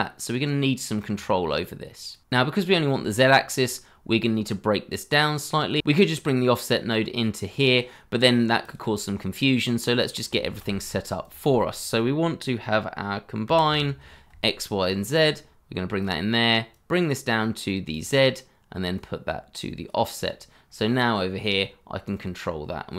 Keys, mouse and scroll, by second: 3.0 shift+middle click, 10.4 shift+a, 13.4-14.1 typing.